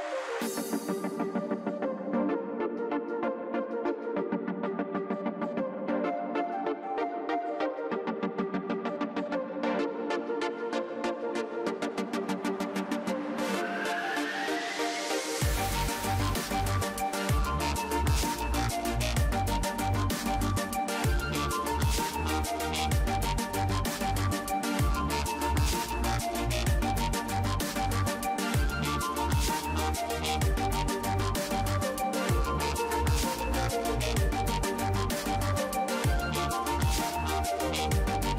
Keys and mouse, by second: 0.4-2.1 drag, 1.6 ctrl+s, 2.1 z, 3.3 z, 3.8 ctrl+s, 4.5 KP_3, 7.1 a, 8.1 b, 8.7 z, 9.1 b, 10.4 z, 11.4 e, 15.2 e, 17.0 e, 18.5 e, 19.4 e, 20.4 e, 21.5 e, 25.5 middle click, 26.3-29.2 drag, 29.2 middle click, 29.2 a, 29.5 b, 30.2-32.9 drag, 31.1 ctrl+z, 31.8 b, 33.5 z, 33.9 click, 36.2 right click, 36.9 KP_3.